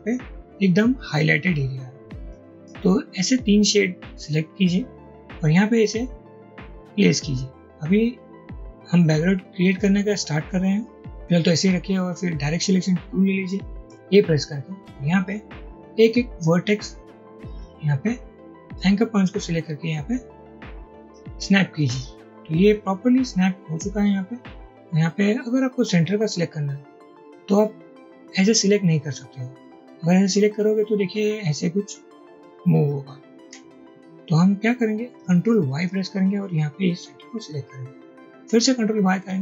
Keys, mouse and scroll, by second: 14.0 a, 18.7-19.5 drag, 33.5 i, 35.9 ctrl+y, 39.2 ctrl+y.